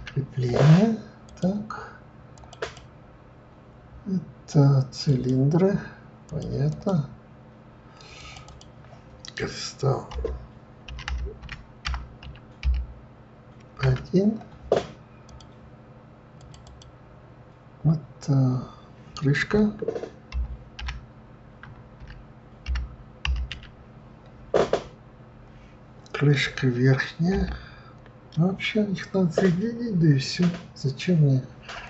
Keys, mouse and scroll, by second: 2.3 click, 2.6-5.7 drag, 6.7 click, 8.2 click, 8.4-11.4 drag, 16.4 click, 16.6-19.6 drag.